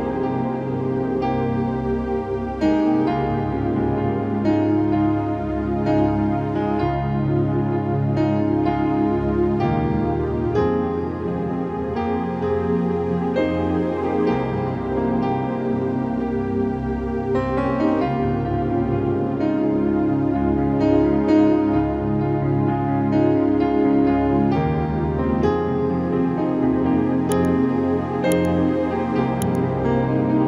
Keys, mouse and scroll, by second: 1.6 click, 3.7 click, 4.9 click, 5.3 1, 6.8-8.4 typing, 8.0 click, 9.6 click, 10.0 typing, 11.2 click, 11.8 1, 13.0-17.1 drag, 17.7 click, 18.4 Right, 19.7 Down, 20.9 right click, 21.7-26.5 drag, 28.6 ctrl+i, 29.6 alt+click.